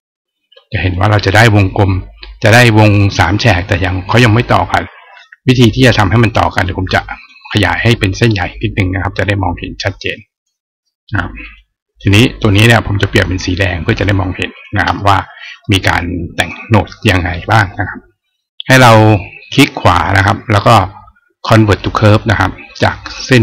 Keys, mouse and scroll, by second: 0.7 click, 6.5 click, 8.4-10.2 drag, 11.2 click, 12.2 click, 13.7 right click, 14.3 click, 16.1 click, 19.7 right click, 21.6 click.